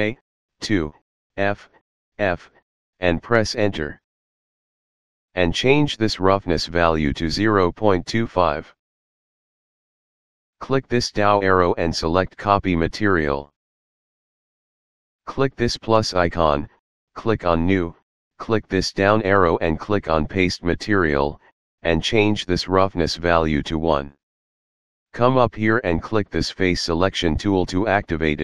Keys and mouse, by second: 0.2 2, 2.5 f, 3.2 Return, 5.5 click, 7.8 KP_Decimal, 8.0 KP_2, 8.2 KP_5, 8.7 Return, 12.4 click, 13.8 click, 16.0 click, 17.6 click, 19.5 click, 20.8 click, 23.2 click, 28.2 click.